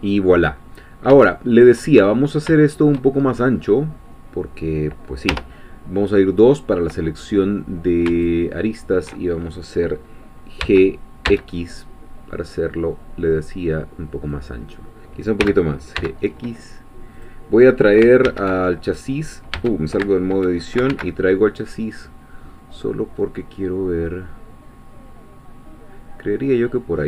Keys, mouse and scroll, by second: 0.8 scroll down 2, 1.3 shift+middle click, 2.0-2.5 shift+scroll down 3, 2.5 shift+middle click, 3.2-3.6 shift+scroll up 2, 3.9-4.3 scroll down 2, 5.3 2, 8.1 alt+shift+click, 9.5 alt+shift+middle click, 10.6 g, 14.3 click, 15.4 g, 17.2 click, 18.3 alt+h, 19.5 Tab, 20.9 alt+h, 21.7-27.0 middle drag.